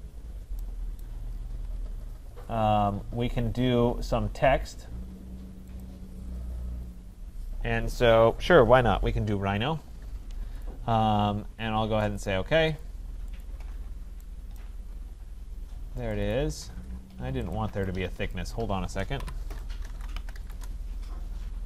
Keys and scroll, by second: 19.2 Delete, 20.5 Return.